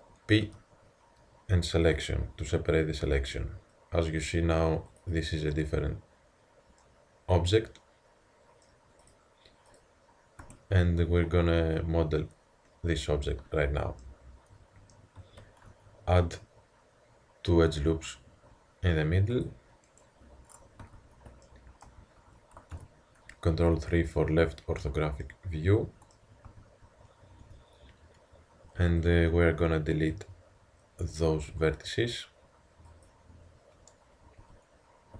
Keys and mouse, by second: 0.4 p, 3.2 Tab, 6.4-6.8 drag, 7.1-7.5 middle drag, 7.5 middle drag, 9.1-13.6 drag, 10.4 Tab, 14.1 middle click, 14.7 middle click, 15.4 ctrl+r, 20.8 a, 21.4-22.7 middle drag, 22.7 ctrl+KP_3, 24.4 middle click, 26.5 a, 27.5 a, 28.7 b, 31.4 x, 34.5 a.